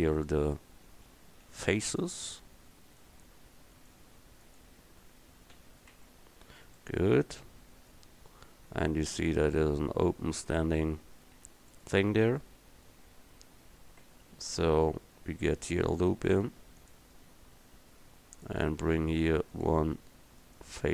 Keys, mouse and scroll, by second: 1.5 f, 5.6 f, 6.0 Tab, 14.1 Tab, 16.2 ctrl+r.